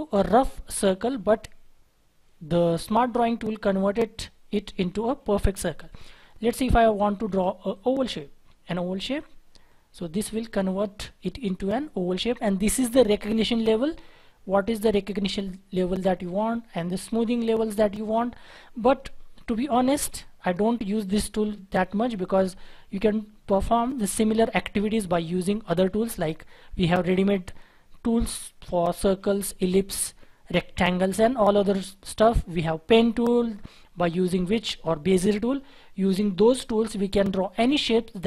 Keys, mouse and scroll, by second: 6.2-6.8 scroll down 1, 6.8-7.9 scroll up 1.